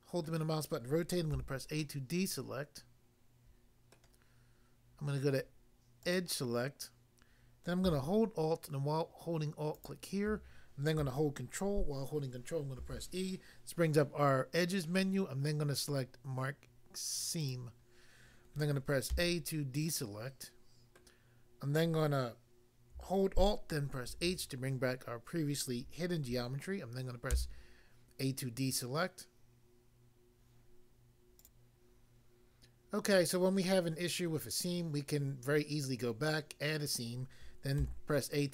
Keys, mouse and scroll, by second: 0.3 middle click, 1.3 a, 1.8 middle click, 3.9 middle click, 6.0 click, 9.8 alt+click, 12.7 ctrl+e, 17.3 click, 19.1 a, 19.8 middle click, 21.0 middle click, 24.1 alt+h, 27.3 a, 31.4 click, 31.5 click, 37.8 a.